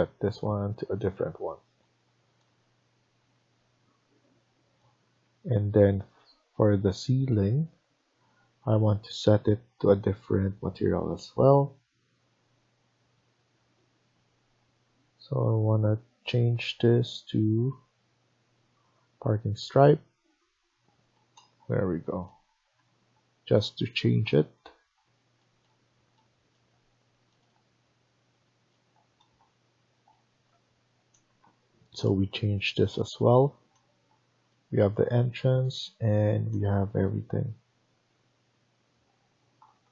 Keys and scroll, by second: 5.1 Escape, 21.1 Escape.